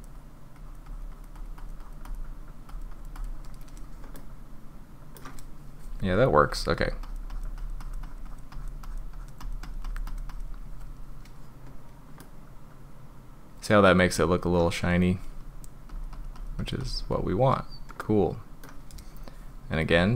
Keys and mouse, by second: 0.6 click, 0.9 click, 1.1 click, 1.4 click, 1.6 click, 1.8 click, 2.1 click, 2.7 click, 2.9 click, 3.2 click, 4.1-5.2 drag, 6.5 click, 6.8 click, 7.0 click, 7.3 click, 7.6 click, 7.8 click, 8.0 click, 8.3 click, 8.5 drag, 8.8 drag, 9.1 click, 9.4 click, 9.6 click, 9.8 click, 10.1 click, 10.3 drag, 12.2-14.1 middle drag, 15.9 click, 16.1 click, 16.4 click, 16.6 click, 16.8 drag, 18.0-18.6 middle drag, 19.9 click.